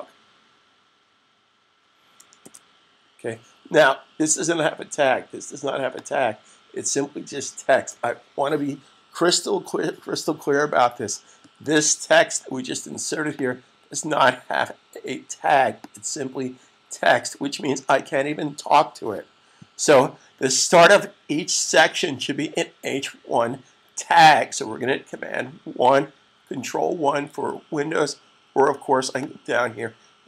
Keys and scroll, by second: 1.3-3.8 typing, 8.0 super+s.